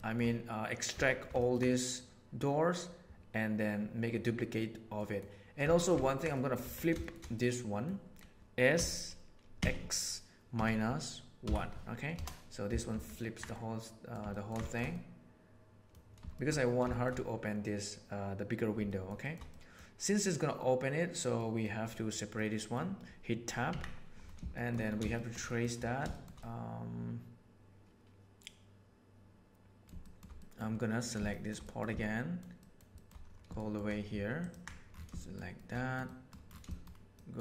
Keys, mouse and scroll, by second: 1.1 shift+middle click, 1.3 ctrl+middle click, 4.9 middle click, 5.7 shift+middle click, 6.3 middle click, 6.6 Tab, 6.9 shift+middle click, 7.3-7.9 middle drag, 8.7 s, 13.5-14.0 middle drag, 14.2 ctrl+middle click, 14.9-16.0 middle drag, 16.2 shift+middle click, 16.7-17.1 shift+middle drag, 18.9-19.3 shift+middle drag, 19.5 middle click, 21.3 middle click, 22.3 middle click, 23.7 Tab, 24.5 shift+middle click, 25.1 shift+middle click, 26.1 shift+middle click, 26.5-30.1 middle drag, 30.4 middle click, 30.9 middle click, 31.3 shift+middle click, 31.6 middle click, 32.0 shift+middle click, 32.6 shift+middle click, 32.9 shift+middle click, 33.5 shift+middle click, 34.4 ctrl+middle click, 35.1 shift+middle click, 35.5 shift+middle click, 36.0 middle click, 36.6 shift+middle click, 37.1 shift+middle click.